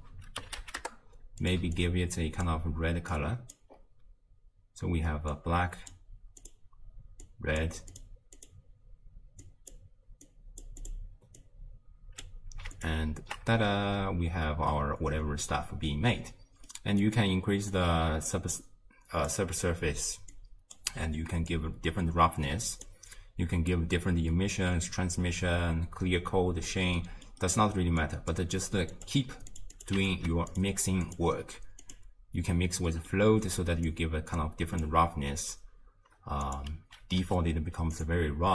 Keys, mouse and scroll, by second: 1.8 alt+click, 3.1 click, 3.8-4.2 scroll up 2, 5.3 click, 6.4 click, 7.9 click, 8.4 click, 11.4 drag, 13.0 ctrl+shift+click, 14.7-17.7 middle drag, 17.7-24.6 drag, 27.0 middle click, 27.5-28.0 scroll down 1, 28.0 click, 28.9 click, 29.8 click, 30.1 ctrl+shift+d, 31.0-32.9 drag, 32.9-33.9 middle drag, 33.9 drag, 36.5-38.1 drag.